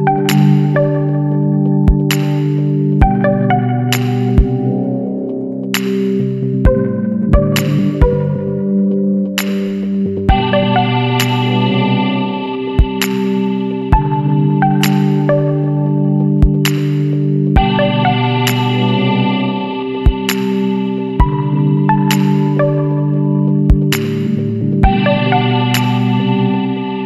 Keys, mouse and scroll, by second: 0.0 KP_Enter, 2.9 click, 6.1 click, 8.8 click, 10.6 click, 11.4 Escape, 12.4 click, 13.7 click, 14.8 KP_1, 15.1 KP_8, 15.4 KP_0, 16.0 KP_Enter, 18.4 click, 20.8 click, 22.0 click, 22.8 Escape, 24.6 click, 26.5 click.